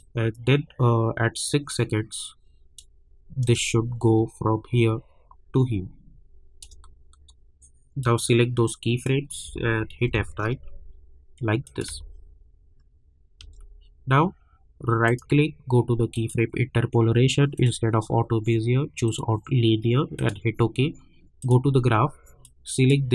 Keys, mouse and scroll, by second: 10.0 F9, 11.6 click, 11.9 space, 15.0 right click, 16.1 click.